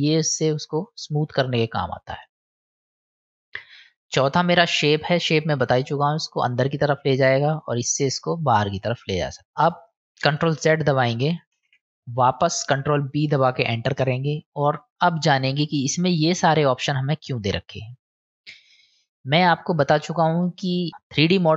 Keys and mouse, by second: 5.3-9.0 drag, 10.5 ctrl+z, 15.5-18.0 drag, 20.4 middle click.